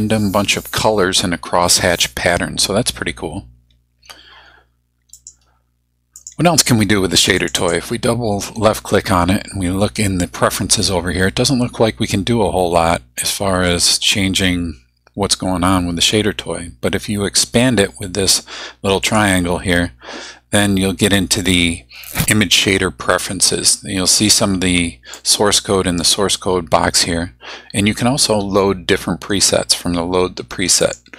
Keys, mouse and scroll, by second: 5.1 click, 6.2 click, 7.4 click, 19.0 click, 25.1-27.1 drag, 30.8 click.